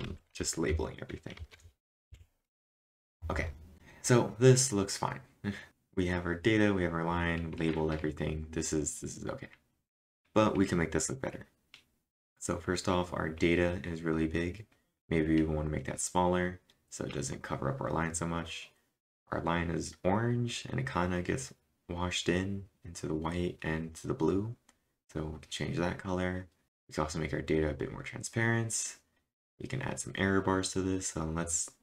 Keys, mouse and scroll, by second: 0.0-0.5 typing, 2.1 Up, 2.9 Return, 2.9-4.1 drag, 3.7-4.5 typing.